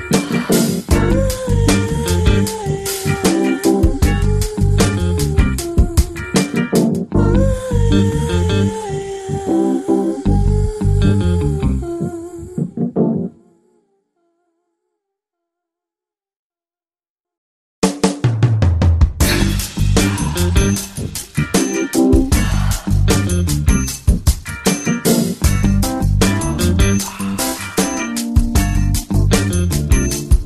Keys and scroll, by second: 23.3 space.